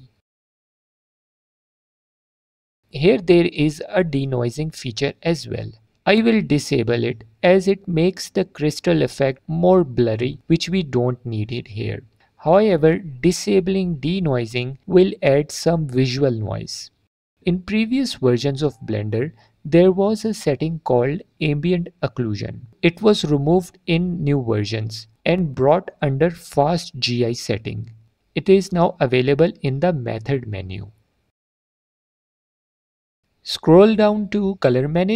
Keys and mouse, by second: 0.4 click, 0.7 click, 1.1 click, 1.4 click, 2.6-3.0 middle drag, 5.0 click, 7.9 click, 10.6-12.7 drag, 13.1 click, 15.3 middle drag, 16.9 alt+click, 20.3 click, 24.6-26.3 drag, 27.3-29.0 drag, 32.0 click, 34.1 click.